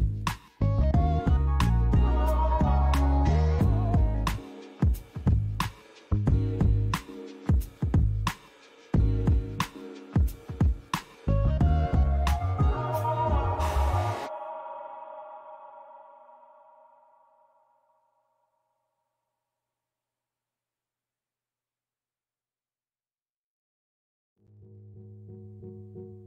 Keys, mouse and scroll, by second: 0.0 middle click, 1.5 g, 1.8 g, 8.2 click, 9.3 Tab, 9.7 middle click, 10.5 click, 11.1 middle click, 11.7 Tab, 12.8-13.7 scroll up 1, 13.7 g, 14.3 z, 16.0 click, 16.6 s, 18.7 click, 19.3 middle click, 20.0 Tab, 20.4 middle click, 21.9 Tab, 22.7 middle click, 23.8 click, 24.7 click, 25.1 middle click.